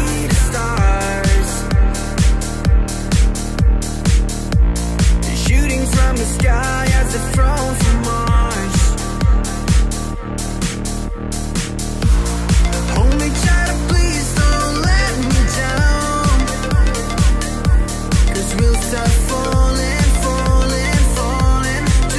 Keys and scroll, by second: 11.9 Right, 12.4-13.3 Right, 13.5 shift+Right, 13.8-14.7 shift+Right, 14.9 shift+Right, 15.1 shift+Right, 18.4 Delete.